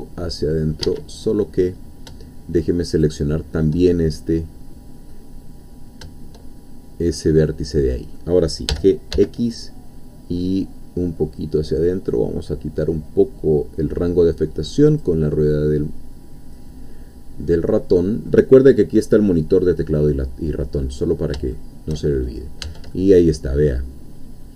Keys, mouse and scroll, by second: 0.8 Escape, 1.3 middle click, 2.9 shift+click, 3.8-5.5 shift+middle drag, 7.2-8.3 middle drag, 8.7 g, 9.1 x, 11.3-11.9 scroll up 2, 11.9 scroll up 1, 14.9 click, 15.4-18.8 middle drag, 20.0 middle click, 21.0-21.4 scroll up 2, 21.5 shift+middle click, 22.2 shift+middle click, 22.6 Tab, 23.0-24.5 middle drag.